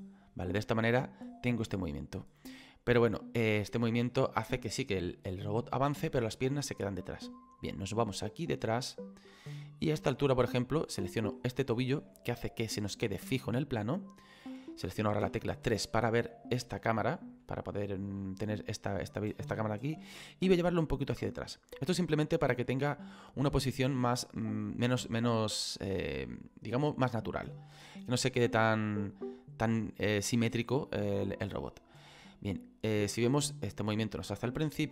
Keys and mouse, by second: 0.7 click, 11.3 right click, 12.1 middle click, 12.8 shift+middle click, 15.1 KP_3, 16.9 shift+middle click, 20.1 click, 22.1 click, 27.3 click, 31.2 click.